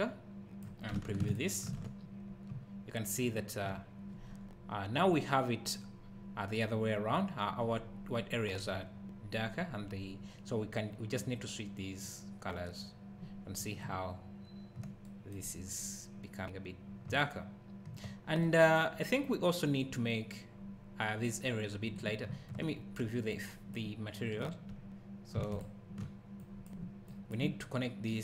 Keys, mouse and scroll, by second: 1.3 ctrl+shift+click, 2.5 `, 11.2 click, 13.5 scroll down 1, 13.8 `, 16.4 scroll up 1, 16.9 scroll down 1, 17.3 `, 19.3-22.3 scroll up 1, 22.3 `, 23.4 click, 23.5 click, 25.6 ctrl+shift+click, 26.4 click, 27.6 click, 28.1 click.